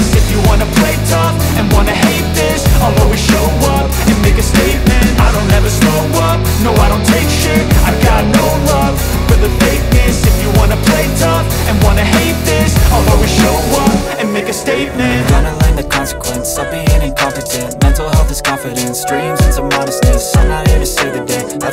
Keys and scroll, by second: 0.8 c, 1.0 Escape, 1.2 F3, 7.0 shift+F2, 7.4 F3, 8.0 shift+Page_Up, 8.3 F3, 10.7 Escape, 11.0 F4, 12.9 F2, 16.9 F4, 21.5 shift+F2.